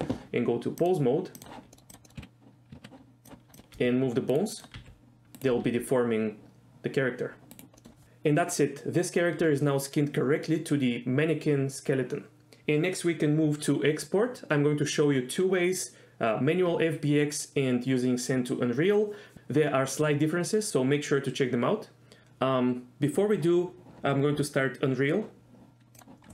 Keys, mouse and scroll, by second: 1.0-1.7 drag, 1.8 middle click, 2.1 middle click, 2.3 z, 2.8 z, 3.3 click, 4.0 r, 4.5 right click, 4.8 click, 5.0 r, 5.6 right click, 5.8 r, 5.9 r, 7.7 right drag, 7.9 middle click.